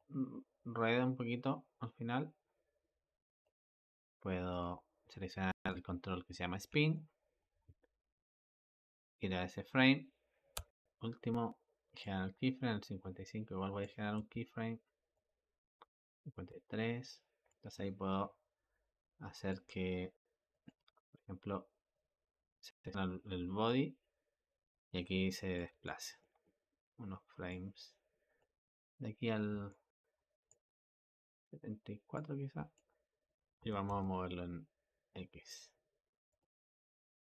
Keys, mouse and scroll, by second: 4.4 click, 5.6 click, 6.8-10.4 shift+middle drag, 11.6 typing, 11.9-14.0 drag, 15.0-16.3 drag, 17.3-20.5 drag, 23.5-33.5 drag, 33.5 g.